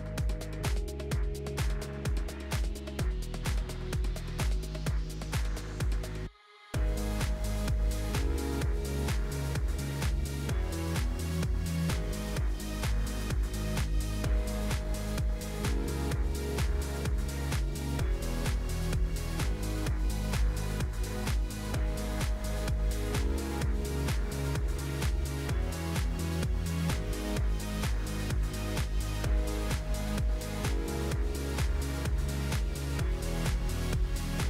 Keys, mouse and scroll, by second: 0.3 click, 1.2-1.7 scroll down 1, 1.7 click, 2.3 h, 2.6 click, 4.5-7.0 drag, 8.2 click, 8.6-9.1 scroll up 4, 9.1-9.9 scroll down 2, 9.9-13.1 drag, 14.2-17.2 drag, 18.5 shift+click, 19.3-21.1 drag, 25.5 ctrl+l, 27.0 Left, 29.0 ctrl+i.